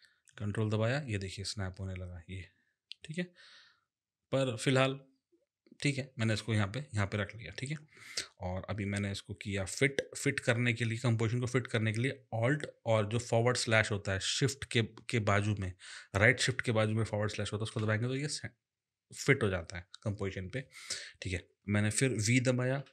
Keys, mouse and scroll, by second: 17.7 alt+/, 22.8 v.